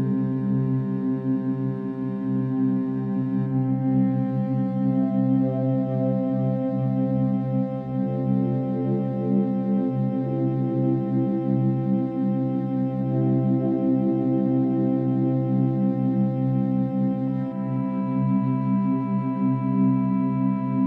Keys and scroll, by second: 4.4 ctrl+=, 4.5 ctrl+-, 5.4 ctrl+=, 5.9 ctrl+-, 6.0 ctrl+=, 6.8 ctrl+-, 8.5 ctrl+d, 19.8 ctrl+d, 20.1 ctrl+-.